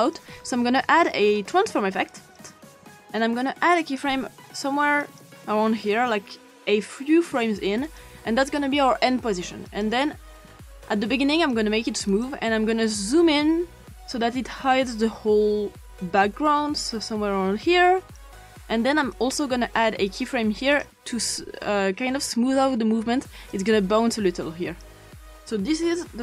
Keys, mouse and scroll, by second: 3.8 click, 7.8 click, 9.7 click, 11.5 click, 13.1-18.2 drag, 19.1 click, 20.7 click, 23.5 click.